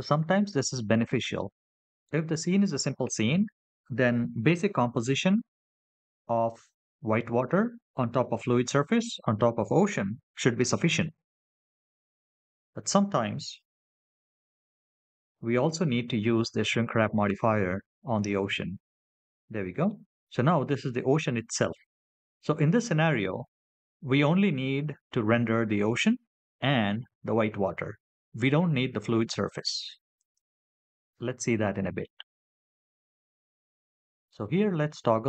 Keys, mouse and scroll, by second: 14.3 click, 19.2 middle click, 27.3-33.0 scroll up 4, 33.0 click.